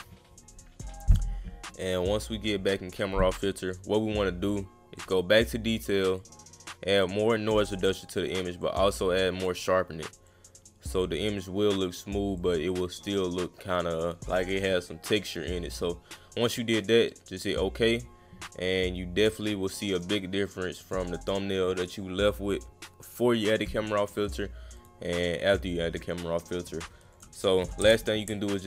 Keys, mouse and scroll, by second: 5.0 click, 6.2-7.7 drag, 8.6 click, 10.3 click, 12.4-14.0 drag, 15.8 click, 17.1 click, 19.3 click, 19.9 click, 20.8 click, 24.8 click, 27.1 click.